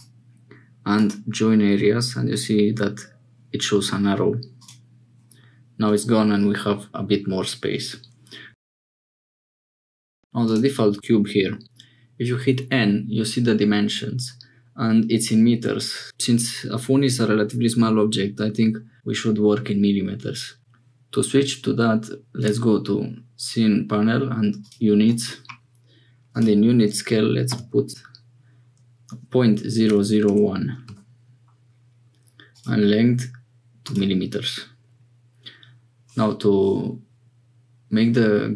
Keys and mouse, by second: 0.0-8.3 middle drag, 10.4 click, 11.6 n, 22.4 click, 26.3-31.8 drag, 32.6-33.9 drag.